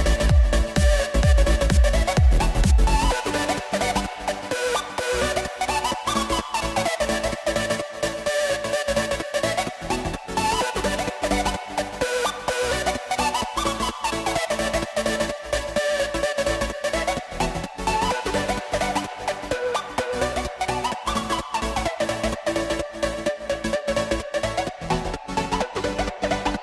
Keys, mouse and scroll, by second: 0.5 click, 1.4 ctrl+z, 2.4 e, 9.9 Tab, 10.4 click, 10.8 scroll down 1, 10.9-11.4 middle drag, 11.4 scroll down 1, 11.5 z, 12.4 click, 12.8-13.6 middle drag, 13.6 scroll down 2, 13.8-14.3 middle drag, 14.3 click, 14.8 KP_1, 15.1-16.6 scroll up 8, 15.7 shift+middle click, 16.6 Tab, 17.6 click, 18.3 click, 19.1 z, 20.0 click, 20.7 click, 21.5 b, 23.8 click, 25.2-26.6 scroll up 2.